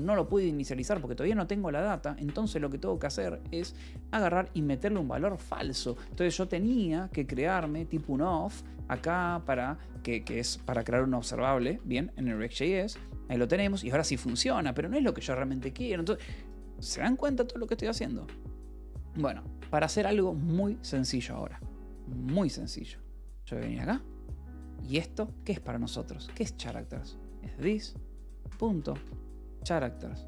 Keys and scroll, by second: 5.9-12.2 typing, 12.6 Return, 12.8 Escape, 19.3 u, 21.8 1, 22.5 j, 22.8 l, 23.9-25.3 typing, 24.7 Escape, 26.9-30.0 typing.